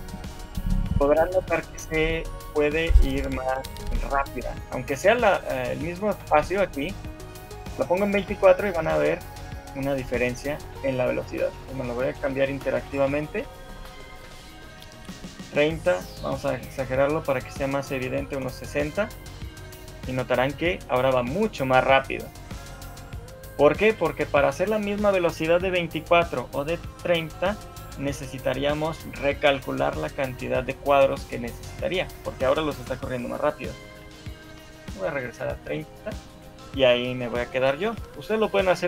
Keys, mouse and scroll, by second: 0.6 alt+a, 1.6 Escape, 4.0 click, 4.8 shift+middle click, 7.2 shift+middle click, 8.4 alt+a, 9.0-9.4 scroll down 6, 9.8-10.2 scroll up 2, 10.4 shift+middle click, 11.4 click, 15.6 click, 24.0 Escape, 35.5 click, 36.1 shift+middle click, 37.7 shift+middle click.